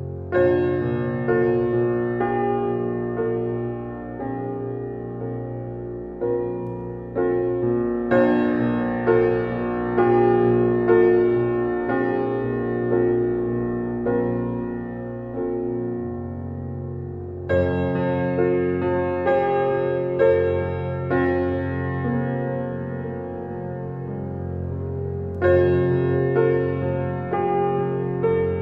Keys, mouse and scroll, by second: 1.7 scroll up 1, 8.8-10.5 drag, 12.2 s, 18.4 shift+click, 19.4 drag, 21.5 ctrl+click, 23.4 g.